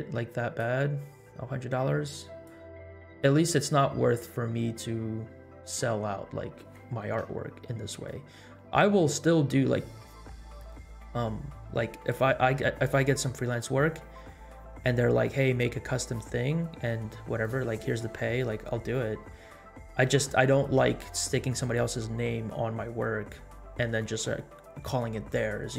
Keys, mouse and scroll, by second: 2.6-3.7 drag.